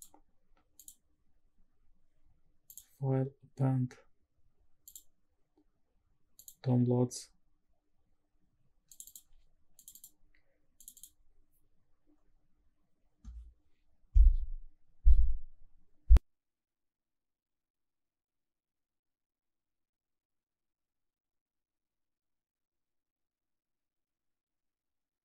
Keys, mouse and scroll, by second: 0.8 click, 2.7-5.0 drag, 25.0 scroll down 2.